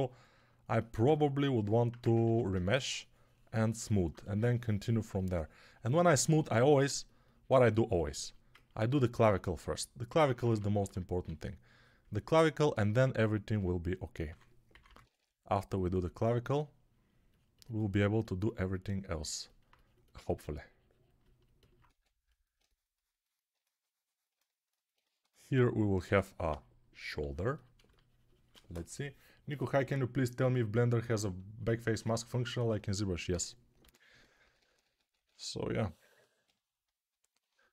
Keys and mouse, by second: 2.2 ctrl+r, 6.6 2, 9.2-10.7 typing, 14.1-15.0 typing, 21.8 1, 25.9 x, 26.4-27.1 ], 33.7-35.2 typing.